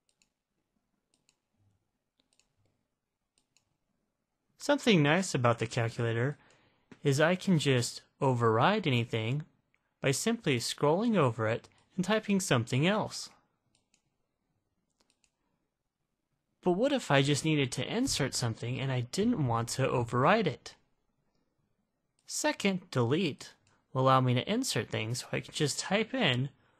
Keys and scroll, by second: 3.7 9, 5.8 (, 6.7 (, 12.1 8, 14.1 ), 15.4 (, 23.9 Delete.